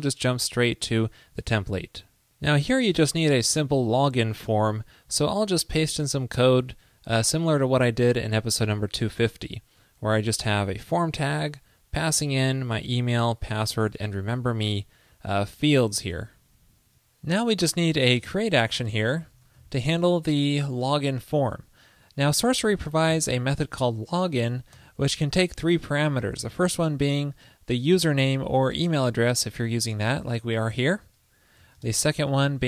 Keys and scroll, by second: 1.0 alt+super+Down, 5.3 super+a, 6.5 super+v, 26.7 ctrl+p, 32.3 ctrl+p.